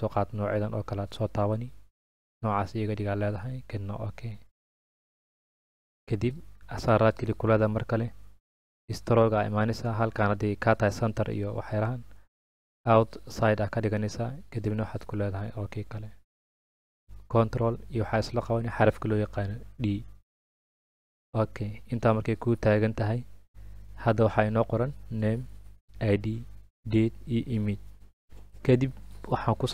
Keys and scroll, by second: 19.1 ctrl+d.